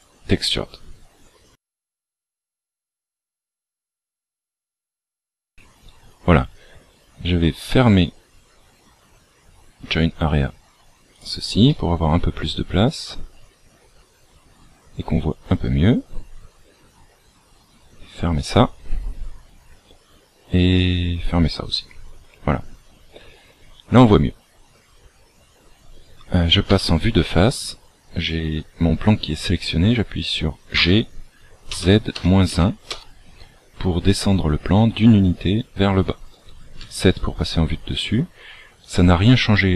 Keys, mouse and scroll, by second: 0.2 click, 1.1-2.8 scroll up 1, 7.8 right click, 17.7 click, 20.8 click, 26.6 KP_1, 30.8 g, 34.0 scroll down 1, 36.7 KP_7.